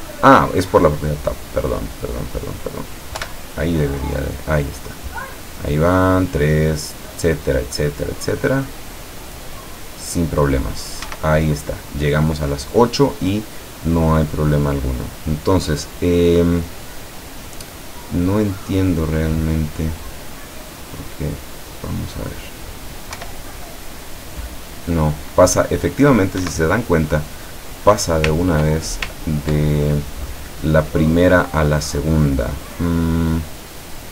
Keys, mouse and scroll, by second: 0.3 click, 1.7 click, 3.2 p, 11.2 Escape, 21.0-22.2 drag, 23.3 p, 26.5 Escape, 28.4 ctrl+click, 29.2-29.7 ctrl+drag.